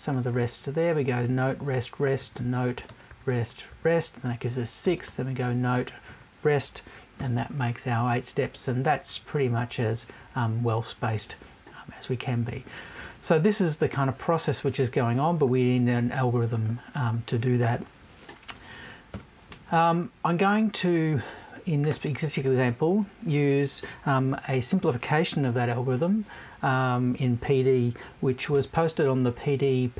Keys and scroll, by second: 19.1 BackSpace.